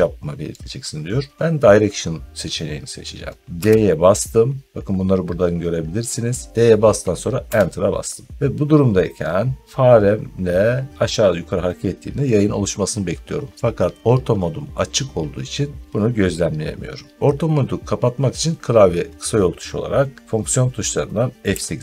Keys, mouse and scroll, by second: 3.4 d, 7.3 Return, 21.3 F8.